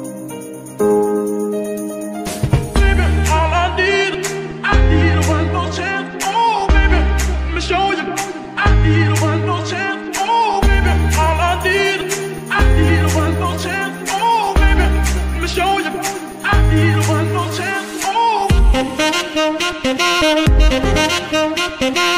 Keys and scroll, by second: 7.6 Escape, 11.5 z, 21.2 KP_0, 21.5 Return.